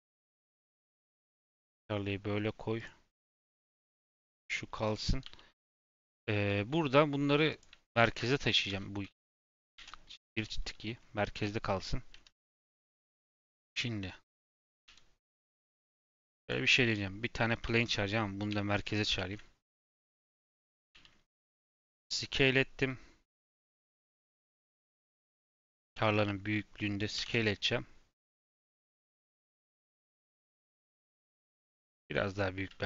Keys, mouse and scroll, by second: 0.3 ctrl+click, 0.9 g, 3.5 click, 3.9 g, 5.2 g, 5.9 shift+middle click, 6.1-6.5 scroll up 2, 6.5 shift+middle click, 7.4 click, 7.8 shift+click, 9.7 alt+g, 10.4-12.9 shift+middle drag, 12.9 shift+a, 14.8 KP_7, 15.6 shift+a, 17.6 x, 18.4 shift+s, 19.1 shift+a, 20.7 g, 23.6 g, 25.7 s, 28.7 middle click, 29.2 scroll up 2, 30.4 s.